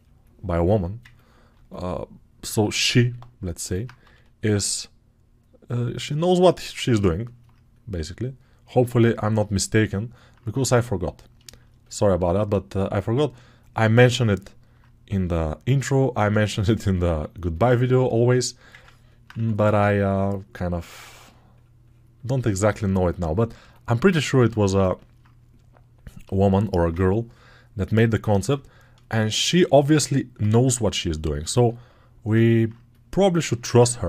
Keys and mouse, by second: 3.9 g, 7.1-8.9 right drag, 8.9-16.5 alt+drag, 16.5 alt+right click, 17.4-34.0 ctrl+alt+shift+drag.